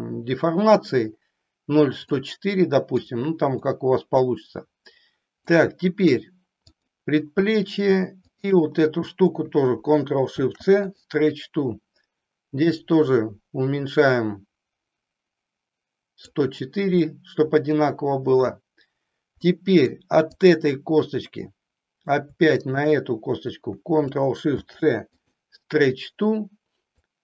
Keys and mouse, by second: 2.1-3.1 middle drag, 3.6 middle click, 5.5 middle click, 8.3 shift+click, 12.8-16.3 drag, 17.0-18.5 middle drag, 19.4 middle click, 20.3 click, 21.4 middle click, 22.5 shift+click, 24.5 ctrl+shift+c, 26.9-27.2 drag.